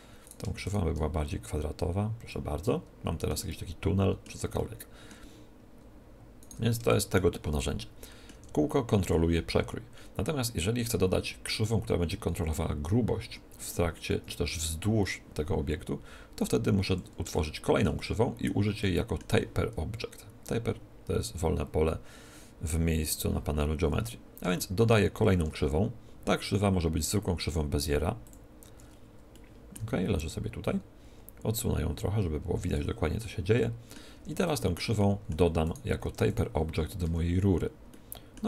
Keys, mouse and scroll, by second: 1.2-2.9 drag, 2.9-6.2 middle drag, 6.3-7.7 right drag, 7.5 middle click, 7.9 right click, 8.2 Tab, 8.4 middle click, 16.6-20.6 middle drag, 24.5-26.1 middle drag, 25.2 shift+a, 26.3 middle click, 29.2-31.0 middle drag, 29.7 z, 31.5-33.3 drag, 33.2-36.8 middle drag, 34.1 Tab, 35.1 Tab, 36.0 Tab, 36.8-37.8 right drag, 37.0 z, 37.8-38.4 middle drag.